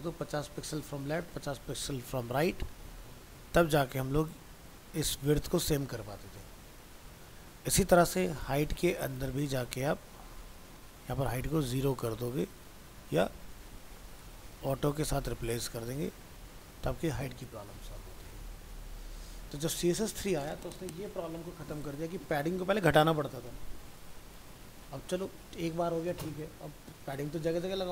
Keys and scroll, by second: 2.7 ctrl+s, 7.8 alt+Tab, 12.0 ctrl+s, 15.3 ctrl+s, 15.7 alt+Tab.